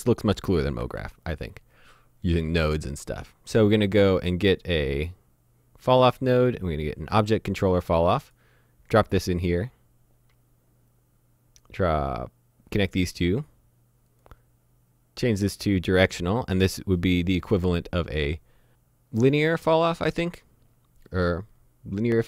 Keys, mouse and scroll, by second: 0.4 click, 0.8 shift+a, 7.1 click, 15.8 click.